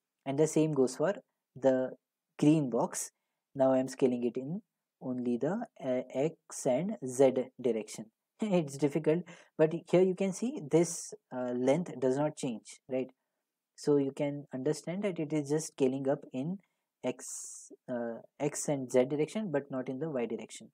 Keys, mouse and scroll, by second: 10.3 click.